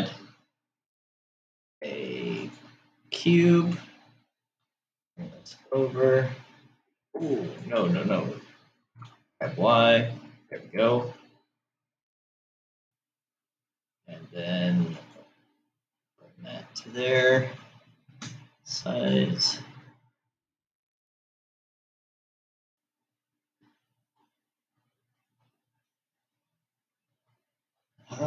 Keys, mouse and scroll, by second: 5.1 g, 9.3 g, 18.8 s.